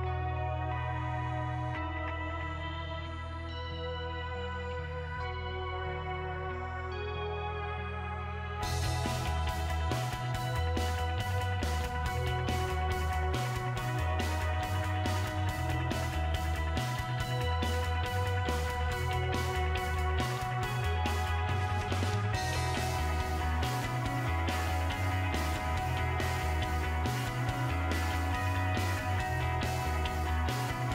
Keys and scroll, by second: 12.1 Left, 12.8 BackSpace, 13.7 2, 15.7 BackSpace, 16.0 1, 18.1-21.8 typing, 23.9 BackSpace, 25.7 BackSpace, 28.7-30.4 typing.